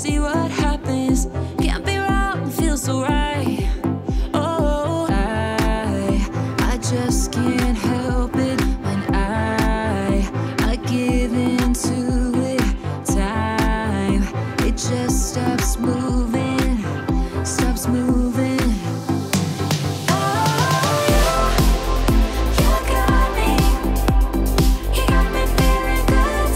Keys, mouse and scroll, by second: 3.4-4.3 middle drag, 4.8-5.7 click, 6.7-7.7 alt+drag, 10.6-11.2 middle click, 11.5 click, 13.9-14.3 scroll down 1, 14.5 middle click, 16.5-22.0 drag.